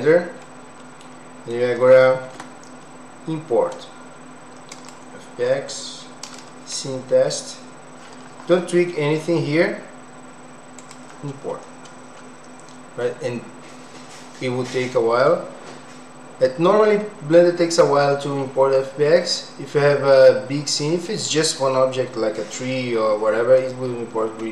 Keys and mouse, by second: 0.4-1.6 middle drag, 2.2 ctrl+s.